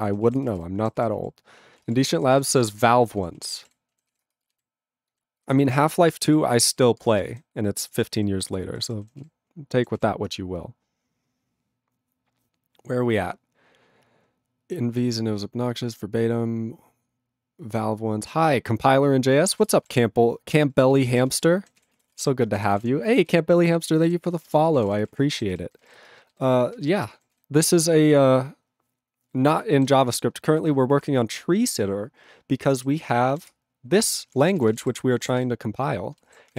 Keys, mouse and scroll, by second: 0.1 ctrl+s, 0.3 ctrl+a, 0.4 ctrl+space, 0.5 ctrl+e, 0.5 ctrl+g, 1.0 ctrl+s, 1.2 ctrl+a, 1.8 ctrl+space, 1.8 ctrl+e, 1.9 ctrl+g, 2.4 ctrl+s, 2.5 ctrl+a, 2.7 ctrl+space, 2.7 ctrl+e, 2.8 ctrl+g, 3.2 ctrl+s, 3.4 ctrl+a, 3.5 ctrl+space, 3.6 ctrl+e, 3.6 ctrl+g, 4.1 ctrl+s, 4.2 ctrl+space, 4.7 ctrl+alt+b, 5.4 ctrl+alt+f, 6.3 ctrl+g, 6.9 ctrl+s, 7.0 ctrl+space, 7.4 ctrl+alt+b, 8.2 ctrl+g, 8.5 ctrl+e, 8.6 ctrl+n, 9.3 ctrl+s, 19.6 ctrl+a, 19.8 ctrl+e, 19.8 ctrl+g, 20.9 ctrl+s, 21.1 ctrl+a, 21.2 ctrl+space, 21.3 ctrl+e, 21.4 ctrl+g, 21.8 ctrl+s, 22.0 ctrl+a, 22.1 ctrl+space, 22.1 ctrl+e, 22.2 ctrl+g, 22.5 ctrl+space, 22.6 ctrl+a, 22.8 ctrl+g, 22.8 ctrl+e, 23.3 ctrl+s, 23.7 ctrl+a, 23.9 ctrl+space, 24.0 ctrl+e, 24.0 ctrl+g, 24.4 ctrl+space, 24.5 ctrl+a, 24.5 ctrl+p, 24.8 ctrl+g, 24.8 ctrl+e, 24.9 ctrl+n, 25.1 ctrl+e, 25.5 ctrl+s, 25.7 ctrl+n, 25.9 ctrl+e, 26.0 ctrl+space, 26.4 ctrl+alt+b, 26.8 ctrl+alt+f, 27.0 ctrl+g, 27.3 ctrl+s, 33.5 ctrl+Return, 34.0 ctrl+p, 34.1 ctrl+p, 34.4 ctrl+space, 34.5 ctrl+n, 34.6 ctrl+e, 34.7 ctrl+n, 34.8 ctrl+e, 34.8 ctrl+g, 35.4 ctrl+s.